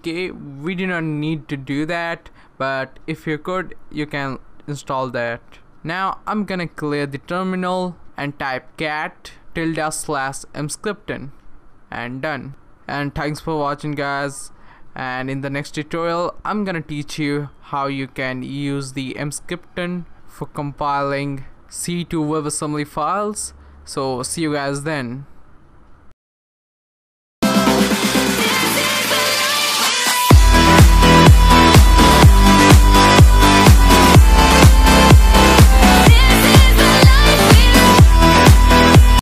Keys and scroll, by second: 6.5-13.7 typing.